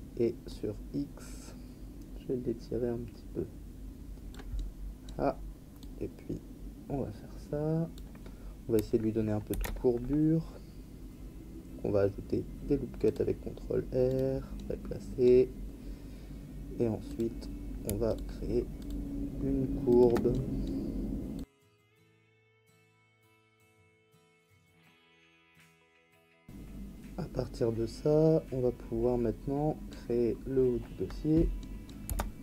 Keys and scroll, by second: 9.5 ctrl+r, 26.2 Tab, 32.0 Tab.